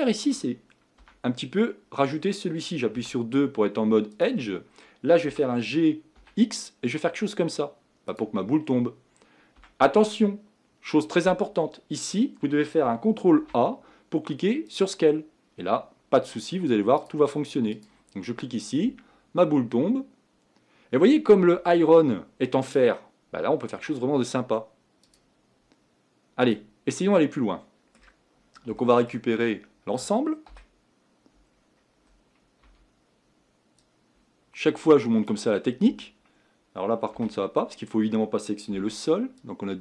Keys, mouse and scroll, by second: 1.0 Tab, 3.0 2, 4.2 click, 5.4 g, 9.6 Tab, 14.8 ctrl+a, 15.4-17.1 scroll down 3, 17.1-27.2 drag, 27.2-30.5 middle drag, 30.5 KP_1, 31.6-35.2 scroll up 3, 35.2 scroll up 1, 35.3 b, 35.7-37.2 scroll down 3, 37.2 a.